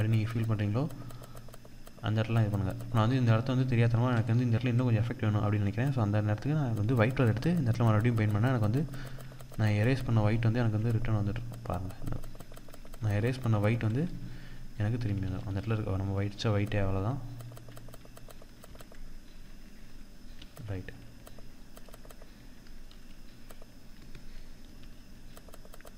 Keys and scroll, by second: 14.7 ctrl+=, 16.6 ctrl+=, 19.8 ctrl+-, 24.2 ctrl+=.